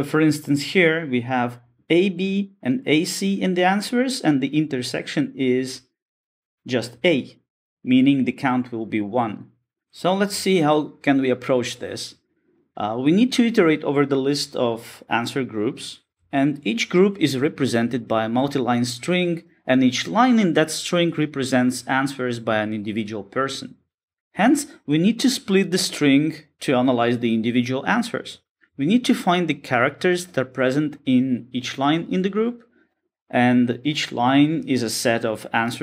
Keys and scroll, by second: 17.6 Tab, 20.0 Return, 24.6 Return, 25.8 Return, 26.9 alt+super+v.